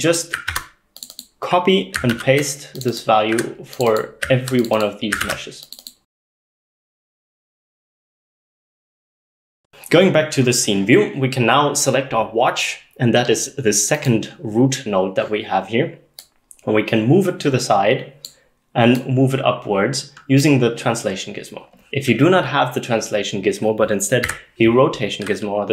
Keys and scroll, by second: 0.5 ctrl+c, 2.2 ctrl+v, 3.4 z, 5.3 ctrl+v, 6.1 ctrl+v, 6.8 ctrl+v, 7.8 ctrl+v, 24.3 r.